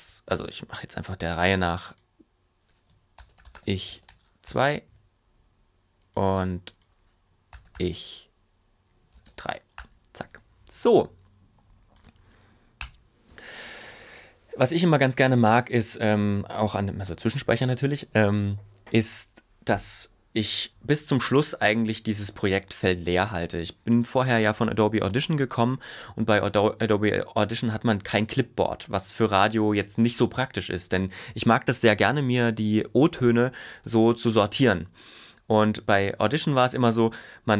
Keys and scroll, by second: 2.9-4.6 typing, 7.3-8.1 typing, 9.1 space, 9.3 3, 12.8 BackSpace, 17.1 super+s.